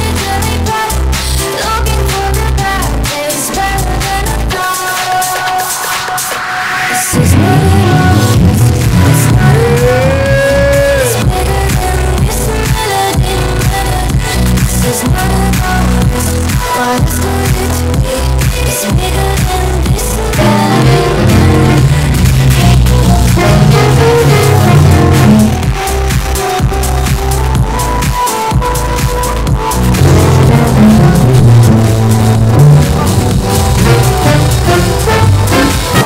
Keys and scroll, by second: 26.0 Page_Down, 36.0 space.